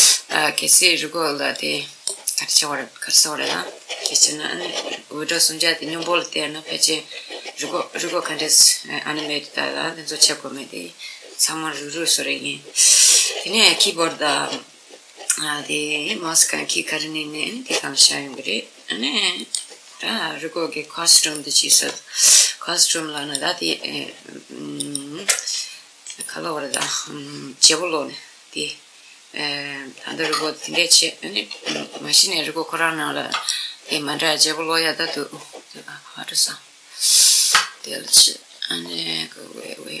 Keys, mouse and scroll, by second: 17.9-20.6 middle drag, 19.0 click, 20.8-23.7 middle drag, 22.8 click, 25.1-28.5 middle drag, 32.9 click, 36.7 click, 37.8-40.0 middle drag.